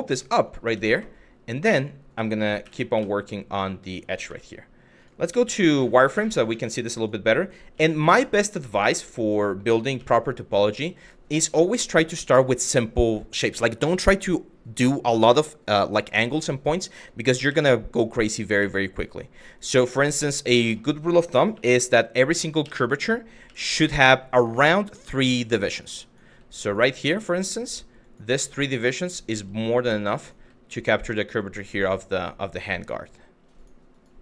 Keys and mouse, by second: 0.3 Tab, 1.3 2, 2.3 w, 2.6 2, 4.6 click, 5.8 shift+middle click, 6.6 click, 7.4 g, 8.4 click, 9.6 g, 10.6 click, 17.1 e, 18.0 click, 18.2 e, 19.2 click, 20.2 click, 20.9 shift+middle click, 21.1 1, 21.8 click, 22.2 f, 24.6 click, 24.7 g, 25.3 click, 26.3 click, 26.6 click, 27.3 click, 27.6 click, 28.4 click, 28.8 click, 28.9 g, 29.4 click, 29.9 click, 30.0 g, 30.6 click, 31.1 click, 31.7 click, 32.4 click, 33.2 click, 33.5 click, 33.7 g, 34.1 click.